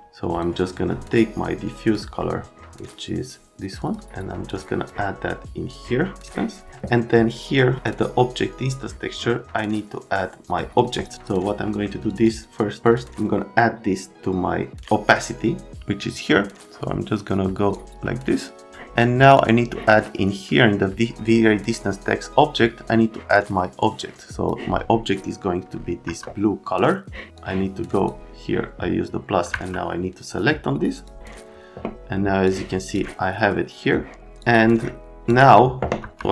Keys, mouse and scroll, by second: 0.0 click, 1.3 click, 2.2 right click, 3.8 click, 4.5 click, 5.6 click, 11.1 click, 11.6 right click, 12.0 click, 12.2 click, 12.8 click, 16.7 click, 19.2 click, 19.3 click, 23.8 click, 26.0 F3, 27.3 click, 29.5 F3, 30.9 click, 32.4 click, 34.4 click, 35.3 click, 36.0 F3.